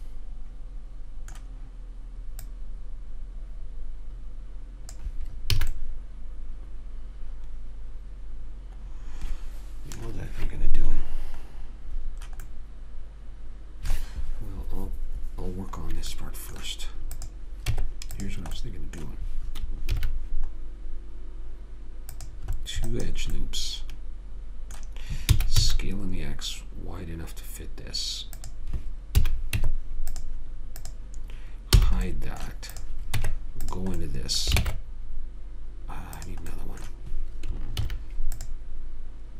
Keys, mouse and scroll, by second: 2.7 click, 5.9 a, 6.2 middle click, 7.5 middle click, 12.4-16.4 middle drag, 17.5 click, 18.0 Tab, 20.3 ctrl+r, 22.4 click, 23.7-25.6 middle drag, 25.6 s, 29.5 a, 29.9 Tab, 31.1 click, 32.1 h, 33.5 Tab, 34.9 ctrl+Tab, 38.1 ctrl+r.